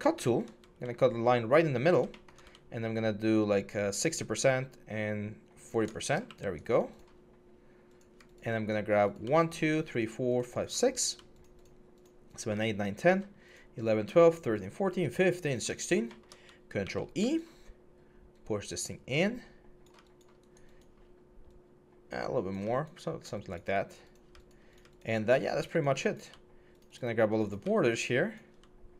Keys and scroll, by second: 16.6 ctrl+e.